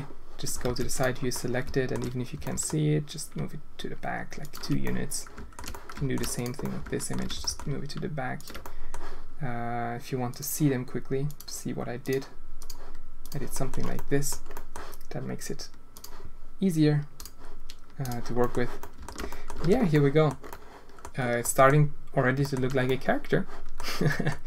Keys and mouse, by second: 0.6 alt+a, 0.9 click, 1.3-1.9 alt+middle drag, 2.3 g, 4.8-5.6 drag, 5.8 shift+drag, 6.5-7.0 alt+shift+drag, 7.6 ctrl+g, 8.7 click, 10.3-11.4 drag, 12.0 click, 13.2 click, 13.5 drag, 13.9-14.2 drag, 14.5 click, 15.9 click, 17.1 click, 18.0 click, 18.7 alt+shift+drag, 19.2 drag, 19.6 alt+a, 19.9-20.2 drag, 20.5 drag, 21.4 drag, 22.4 shift+drag, 22.8-23.7 drag, 24.0 drag.